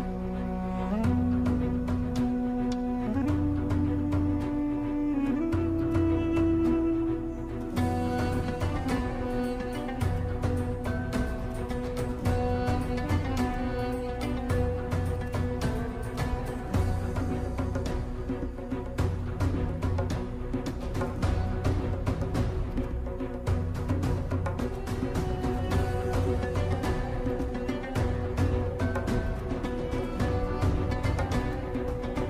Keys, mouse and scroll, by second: 2.2 BackSpace, 4.3 ctrl+d, 5.8-11.4 drag, 13.4-19.5 drag, 19.5 ctrl+t, 20.7 click, 20.7-24.6 shift+drag, 29.3 click, 31.4 click, 31.4 click.